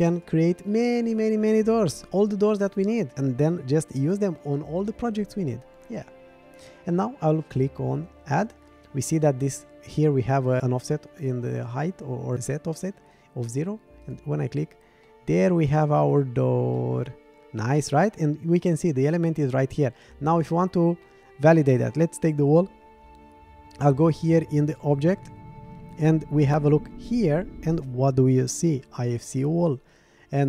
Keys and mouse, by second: 0.1 click, 14.0 click, 15.0-15.8 middle drag, 16.8-17.7 middle drag, 21.0-21.4 middle drag, 21.8 click.